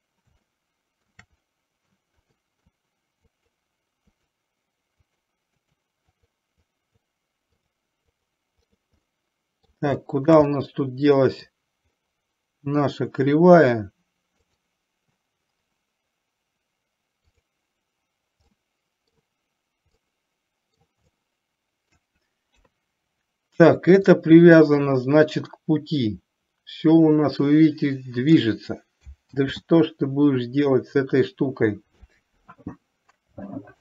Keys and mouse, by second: 0.5-1.2 shift+middle drag, 1.5 middle click, 2.4 middle click, 3.5 click, 4.4 click, 5.1 click, 5.6 click, 6.1 click, 6.9 click, 7.7 click, 8.6 click, 9.1-9.7 middle drag, 10.1 shift+middle drag, 10.5-11.5 middle drag, 14.6 click, 17.4 click, 18.6 middle click, 20.1 middle click, 21.2 shift+middle click, 22.6 KP_3, 24.4-28.5 drag, 29.5 ctrl+z.